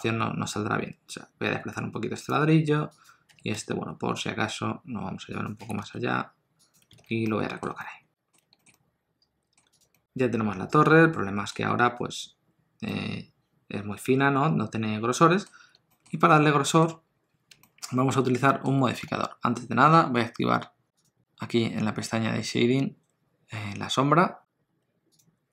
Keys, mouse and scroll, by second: 3.0 click, 3.3 r, 5.6 g, 6.9 alt+a, 7.2 middle click, 7.8 ctrl+middle click, 8.6 shift+middle click, 8.7 middle click, 9.7 click, 9.9 middle click, 12.9 middle click, 16.1 shift+middle click, 16.2 middle click, 17.6 shift+middle click, 19.1 alt+a, 20.9 click.